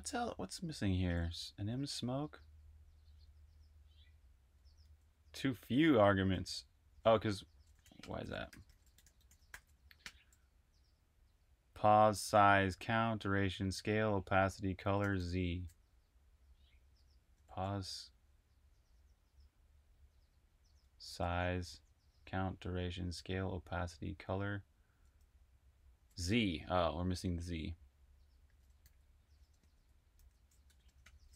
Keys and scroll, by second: 0.0-1.6 typing, 4.7 h, 6.7-10.1 typing, 14.7-15.5 typing, 16.7-19.2 typing, 20.5-22.1 typing, 23.6-26.4 typing, 28.4-31.3 typing.